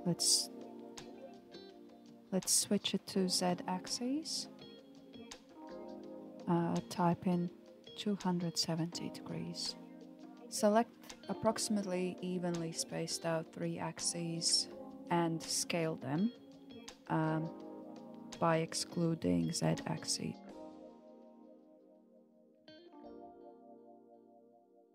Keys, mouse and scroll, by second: 1.4 click, 3.1-6.1 drag, 8.3 click, 9.1 click, 9.9 alt+click, 11.3 alt+shift+click, 15.3 alt+shift+click, 17.2 s, 20.5-23.5 middle drag.